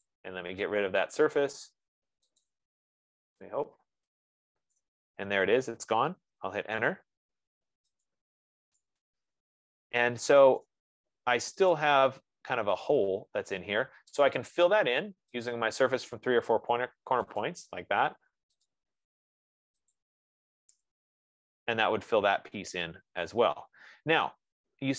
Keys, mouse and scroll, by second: 0.4 click, 1.6-2.3 typing, 2.8 click, 5.2 right click, 6.8 Return, 7.9 middle click, 8.1-8.4 scroll, 8.4 click, 10.3 scroll, 11.0 right click, 12.2 click, 16.0 click, 17.6 click, 19.1 click, 21.3 Return, 23.3-23.6 scroll, 24.8 right click.